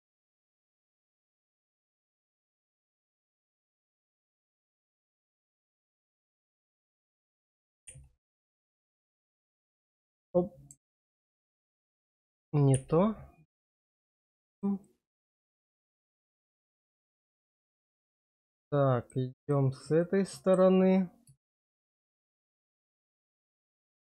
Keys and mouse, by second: 1.8 shift+middle click, 2.3 shift+middle click, 3.8 shift+click, 4.2 shift+click, 4.8 shift+click, 5.2 shift+click, 5.7 middle click, 9.9 click, 12.6 ctrl+e, 14.4 shift+click, 14.9 click, 15.5 shift+click, 16.0 click, 17.1 shift+middle click, 18.1 shift+click, 18.9 shift+click, 19.4 shift+click, 19.9 middle click, 21.9 middle click.